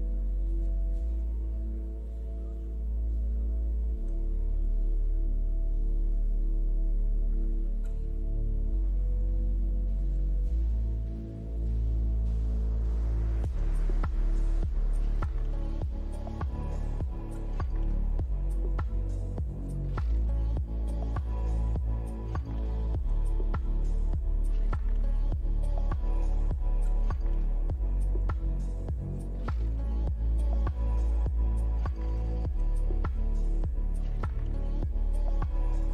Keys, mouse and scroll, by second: 1.7 middle click, 3.1 click, 3.6-4.3 scroll up 3, 4.3-4.6 scroll down 2, 4.6 middle click, 5.1 r, 6.8 middle click, 7.6 click, 7.9-8.4 scroll down 2, 8.4 scroll up 1, 8.6 middle click, 10.5 ctrl+middle click, 11.7 middle click, 14.4 middle click, 17.3 middle click, 20.7 click, 22.7 shift+click, 25.1 ctrl+l, 32.7 middle click, 33.8 click, 34.2 middle click.